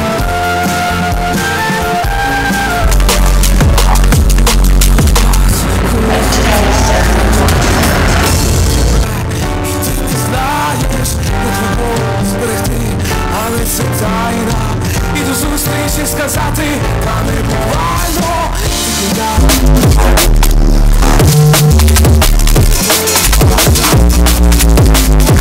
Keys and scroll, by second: 9.1 Page_Down.